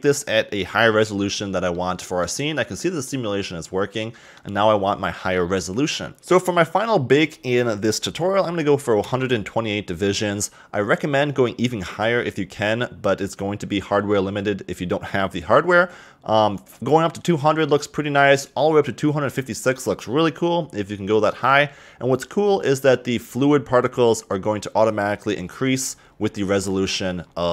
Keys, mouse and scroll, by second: 1.7-2.5 middle drag, 2.5-3.1 scroll up 2, 3.1-6.1 middle drag, 6.2 BackSpace, 22.4-26.2 scroll down 26, 26.3-27.5 scroll up 28.